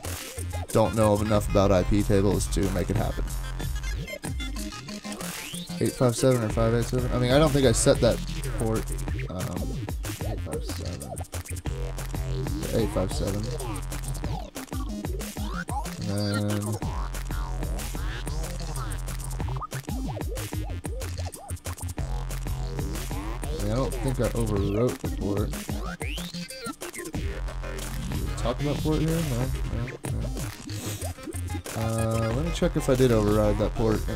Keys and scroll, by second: 14.4 super+Tab, 27.8-28.8 typing, 29.2 super+g, 29.6 super+g, 31.2 super+Tab, 33.0 super+Tab, 34.0 super+Tab.